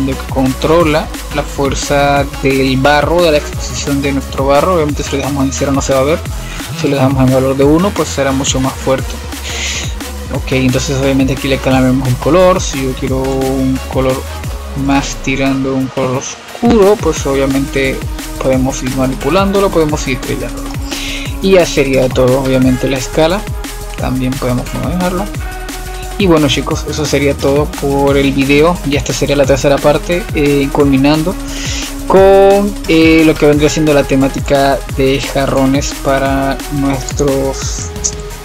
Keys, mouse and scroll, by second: 0.0-3.2 drag, 3.5-5.1 middle drag, 5.1-8.2 drag, 8.2-10.8 middle drag, 10.8-15.0 drag, 19.0-21.5 middle drag, 21.5-21.8 scroll down 2, 21.8-23.4 middle drag, 23.4-25.5 drag, 25.5-26.0 scroll up 2, 26.0 scroll down 6, 26.6-29.6 middle drag, 32.3-34.4 middle drag, 34.4 click, 35.6 click, 37.2-38.4 right drag.